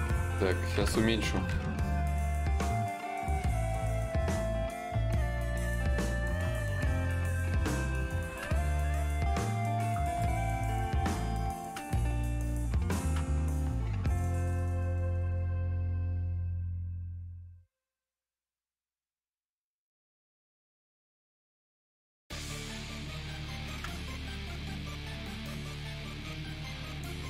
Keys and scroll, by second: 2.0 s, 27.0 ctrl+z.